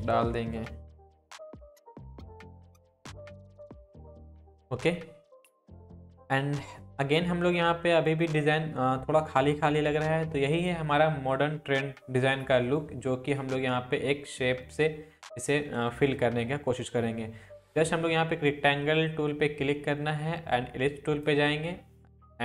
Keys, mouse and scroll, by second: 0.0-1.8 typing, 1.5 click, 2.2 ctrl+t, 2.4 alt+click, 3.6 Down, 6.0 click, 12.7 click, 16.1-21.4 drag.